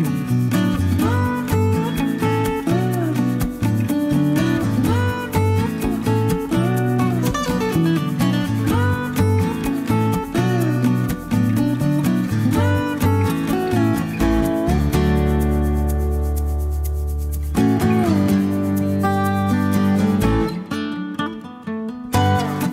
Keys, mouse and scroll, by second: 2.8 click, 4.2 3, 4.5 0, 6.8 click, 7.8 click, 9.2 5, 10.8 click, 11.4 click, 13.0 2, 14.0 0, 15.4-15.8 scroll down 1, 15.8-16.2 scroll up 1, 16.7 click, 17.8 click, 20.2 click, 21.6 7, 21.9 5.